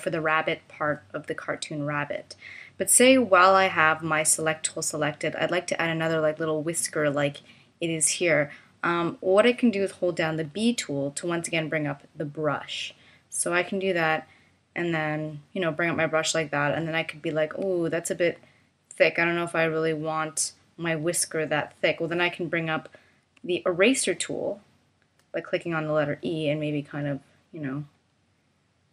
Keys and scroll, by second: 10.5 b, 23.4 e.